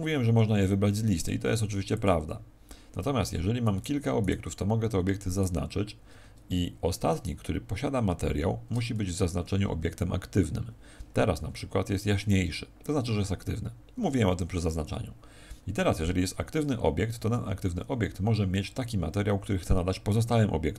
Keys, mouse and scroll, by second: 1.1 click, 3.6 right click, 5.2 right click, 5.6 shift+right click, 9.1 z.